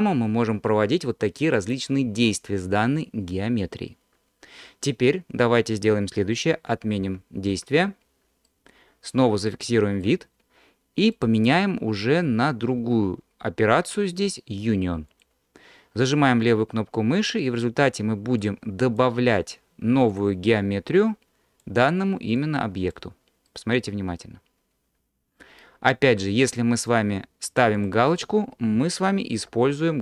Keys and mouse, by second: 6.7 ctrl+z, 7.1 ctrl+z, 7.5 ctrl+z, 8.6 middle click, 9.3 alt+click, 11.3-15.3 drag, 16.5-17.6 drag, 18.4 click, 20.1 click, 21.1 click, 22.5 click, 23.5-26.2 middle drag, 26.2 alt+click, 27.8 click, 29.4 f.